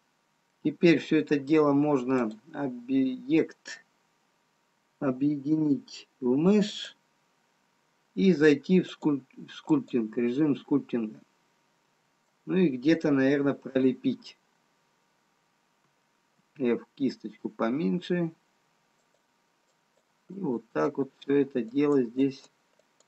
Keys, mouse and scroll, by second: 0.0 middle click, 3.5 click, 9.6 click, 12.0 shift+click, 12.0 middle click, 15.2 click, 15.2-16.7 scroll up 1, 16.7 f, 20.4 click.